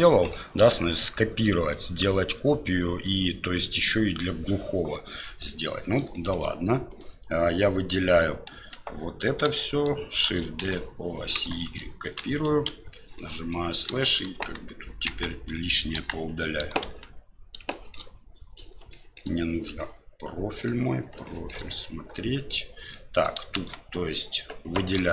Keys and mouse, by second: 5.2 middle click, 6.1 shift+middle click, 6.9 right click, 8.5 Tab, 10.2 shift+d, 11.7 shift+middle click, 12.2 KP_Divide, 12.6 KP_Divide, 13.1-13.5 middle drag, 14.0 shift+middle drag, 15.1 Tab, 15.9 KP_1, 16.8 shift+z, 17.7 shift+middle click, 18.9 shift+middle click, 19.8 middle click, 21.2 shift+middle click, 22.9 middle click, 23.6 shift+z, 24.9 l.